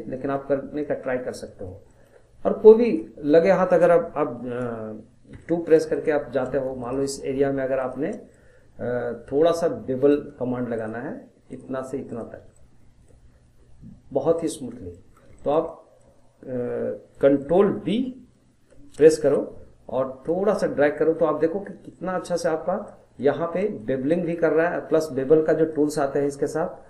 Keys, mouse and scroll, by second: 0.5 scroll, 0.8 middle click, 1.3 scroll, 1.5-2.8 middle drag, 2.8 click, 5.3 2, 5.9 click, 6.8 shift+click, 7.8 shift+click, 8.1 scroll down 2, 8.3-10.7 middle drag, 10.7 shift+click, 11.5 shift+click, 12.1 shift+click, 12.5 middle click, 13.3 scroll up 2, 14.7 shift+scroll down 1, 14.9-18.9 middle drag, 18.9 ctrl+b, 22.6 scroll down 1, 22.9 middle click, 23.4 scroll up 1, 23.6-25.7 middle drag, 25.7-26.8 drag.